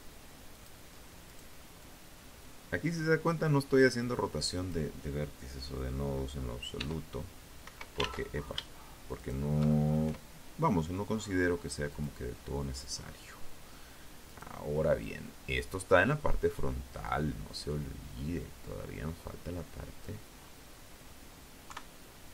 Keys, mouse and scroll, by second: 4.9 e, 5.8 Escape, 6.7 ctrl+shift+z, 7.3 shift+right click, 8.2 shift+e, 10.1 click, 10.5-11.1 scroll down 2, 11.1-11.4 scroll up 2, 11.4-12.4 scroll down 2, 12.4 right click, 13.1 click, 15.2-18.4 drag, 18.5-19.8 scroll down 4, 19.8 KP_3.